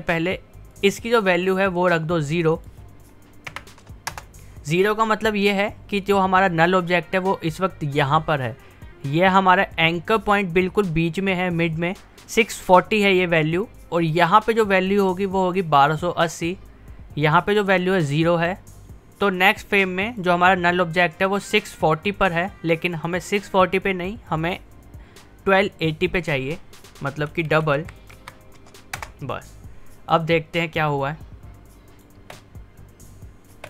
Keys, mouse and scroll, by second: 4.2 Return, 18.7-26.2 drag, 29.0 Return, 30.7-32.2 drag, 32.2 space.